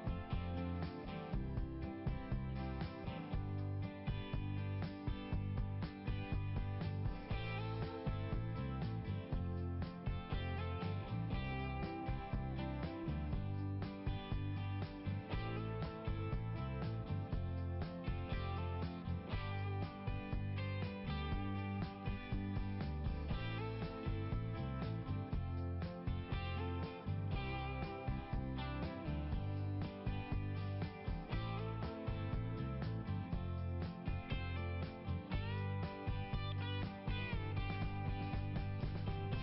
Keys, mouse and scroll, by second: 0.0 click, 0.3 click, 1.0 click, 1.1 double click, 2.4-4.4 typing, 2.4 double click, 4.2 Return, 4.5 Return, 6.5 click, 7.6 right click, 7.7 click, 8.0 right click, 9.2 click, 10.4 click, 10.9 BackSpace, 13.1 1, 15.4 1, 17.6 click, 26.8 ', 27.0 click, 27.2 ', 27.3 click, 29.4 click, 29.7 click, 30.0 click, 30.4 click, 30.7 click, 31.0 click, 31.4 click, 31.7 click, 32.1 click, 33.6 click, 35.1 click, 38.6 click.